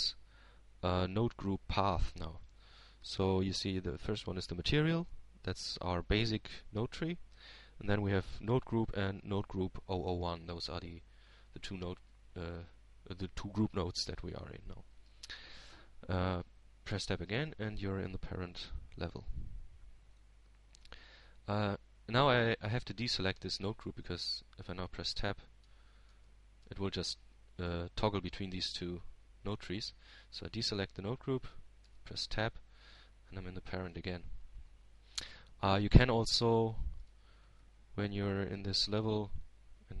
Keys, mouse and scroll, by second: 14.6-16.7 drag, 20.6 Tab, 23.9-24.9 middle drag, 28.7 Tab, 33.2 click, 35.5 Tab, 37.0-38.0 middle drag, 39.9-40.0 drag.